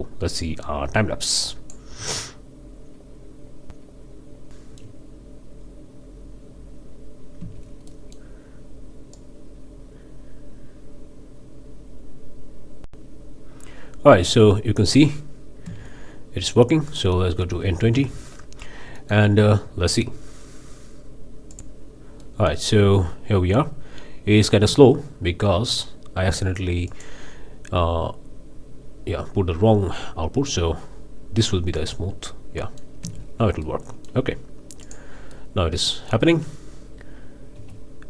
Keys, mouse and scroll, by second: 0.3 shift+click, 0.8 shift+q, 1.4 shift+click, 2.1-3.7 middle drag, 3.7 shift+click, 3.8 shift+middle click, 3.8-11.3 typing, 4.1 click, 4.2 shift+click, 4.3 shift+click, 4.5 click, 4.6 shift+click, 4.7 shift+click, 5.0 scroll down 2, 6.4 click, 6.6 shift+click, 6.8 click, 7.1 shift+click, 7.4 click, 7.5 shift+click, 7.6 shift+click, 7.9 click, 8.0 shift+click, 8.3 click, 8.4 shift+click, 8.7 click, 8.8 shift+click, 9.2 click, 9.4 click, 9.5 shift+click, 9.6 shift+click, 9.8-10.2 middle drag, 10.3 shift+click, 10.7 shift+click, 11.2 shift+scroll down 2, 11.2 shift+click, 11.4 click, 12.1 click, 12.1 Tab, 12.4 shift+drag, 12.4 z, 12.6 space, 15.7 space, 16.9 click, 17.6 KP_2, 17.7 KP_0, 17.9 KP_Enter, 18.6 scroll down 2, 19.0-19.3 middle drag, 21.6 click, 22.2 middle click, 23.0 space, 24.7 space, 26.9 click, 31.7 click, 32.6 middle click, 33.0 space, 33.6-34.3 middle drag, 34.8-35.1 drag, 35.3-36.3 middle drag, 37.5 z.